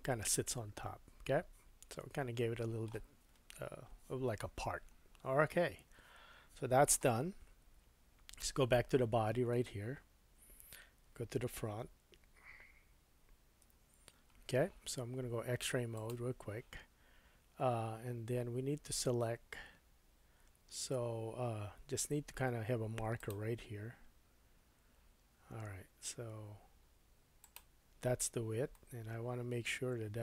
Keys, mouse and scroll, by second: 6.0-6.3 scroll down 3, 8.2 Tab, 13.7 KP_1, 15.9 click, 23.3-27.4 drag, 27.5-29.2 shift+drag, 28.7 middle click.